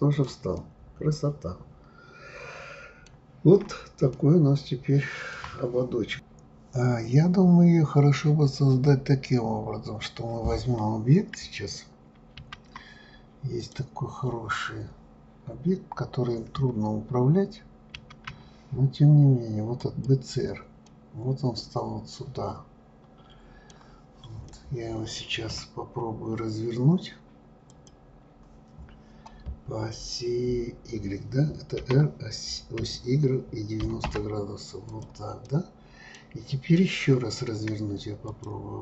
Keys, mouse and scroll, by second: 0.1 click, 0.5-3.5 middle drag, 3.5-4.1 scroll up 2, 4.1-6.1 shift+middle drag, 13.6 click, 17.9 shift+a, 20.8-23.9 middle drag, 24.4-27.5 middle drag, 27.7 click, 31.8 r, 35.4-38.3 middle drag, 38.3 click.